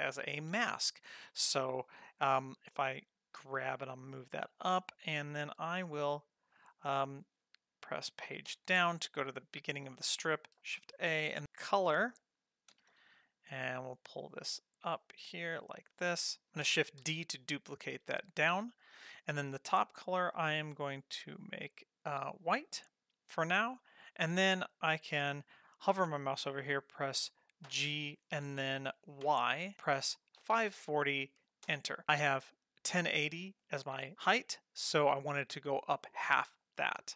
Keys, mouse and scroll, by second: 1.2 click, 3.4 g, 8.5 Page_Down, 10.9 shift+a, 12.7 g, 15.4 middle click, 16.0-16.4 middle drag, 17.0 shift+d, 19.2 click, 22.2 click, 23.7-26.8 scroll down 1, 27.7 g.